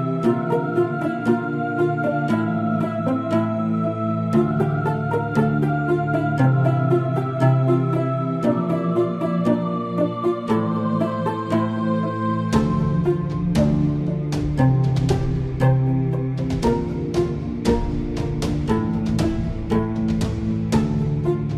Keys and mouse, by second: 10.0 z, 10.5 middle click, 12.7-14.5 drag, 14.5-16.7 middle drag, 16.5 Tab, 18.3 middle click, 19.6-20.6 middle drag, 21.3-21.5 middle drag.